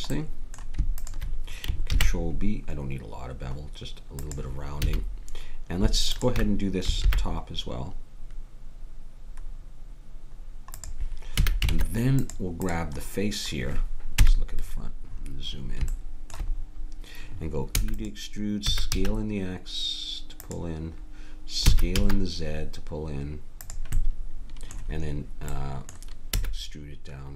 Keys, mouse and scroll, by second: 1.9 ctrl+b, 4.8 a, 6.1-7.8 drag, 7.0 ctrl+b, 11.3 a, 11.7 ctrl+Tab, 14.2 KP_1, 17.7 e, 18.7 s, 21.6 s, 24.0-25.5 middle drag, 26.3 e.